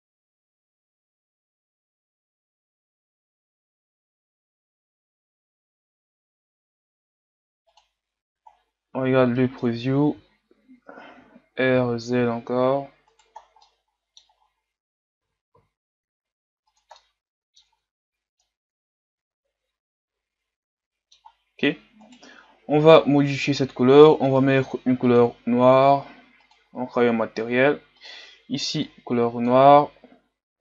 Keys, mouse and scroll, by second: 0.0 Tab, 0.1 a, 0.1 a, 0.2 click, 0.7 KP_3, 0.9 scroll up 1, 1.1 r, 2.2 click, 2.7 Tab, 2.7-6.1 typing, 2.9 scroll down 6, 2.9 middle click, 3.4 scroll up 2, 3.6 right click, 3.7 Tab, 4.9 Tab, 5.1 scroll down 3, 5.3 scroll up 4, 5.4 Tab, 5.8 click, 6.8 Tab, 6.9-7.3 scroll down 11, 7.3-8.1 scroll up 1, 8.1 click, 8.5-9.4 scroll down 2, 9.4-10.1 scroll up 4, 10.1 Tab, 11.3 r, 13.4 scroll down 2, 13.6 middle click, 14.4-14.7 scroll up 4, 15.3 r, 17.1 middle click, 17.7 Tab, 18.5-22.2 middle drag, 22.2-25.3 right drag, 26.9-28.9 drag.